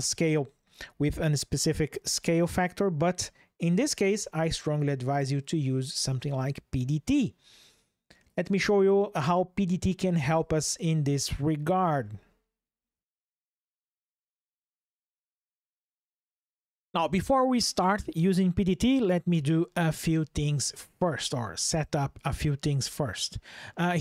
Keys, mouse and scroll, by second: 8.0 click, 10.1 click, 11.8 shift+click, 21.9 click, 23.8 ctrl+shift+\.